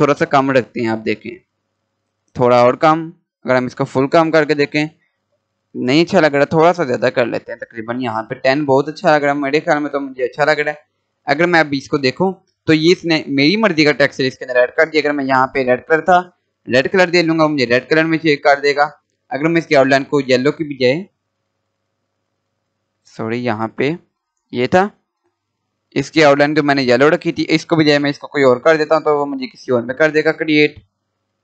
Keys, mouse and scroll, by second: 8.9 scroll down 1, 10.5-10.9 scroll up 1, 10.9 scroll down 1, 13.7 scroll up 1, 16.0 click, 19.8 click, 22.7 click, 28.5 click, 30.9 right click, 31.3 click.